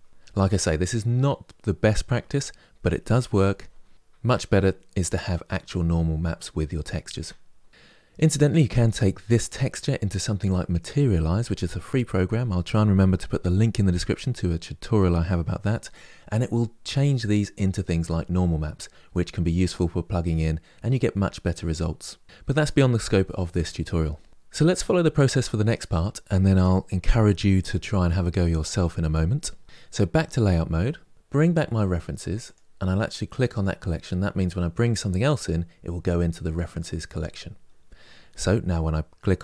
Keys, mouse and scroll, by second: 30.2 click, 31.1-32.1 middle drag, 32.1 click, 33.3 click, 36.9-37.3 scroll down 3.